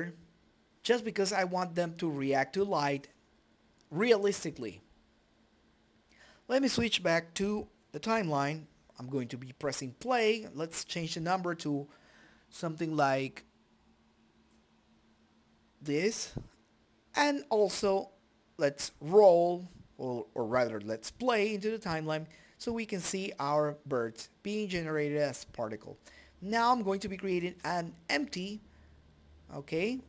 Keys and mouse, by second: 4.2-5.6 drag, 5.9 click, 6.8 click, 8.2-11.0 drag, 11.7 click, 16.1 click, 18.1 click, 18.7 click, 19.0 click, 19.8 click, 22.1 click, 23.0 click, 24.6-25.7 drag, 25.9 click, 29.5 shift+z.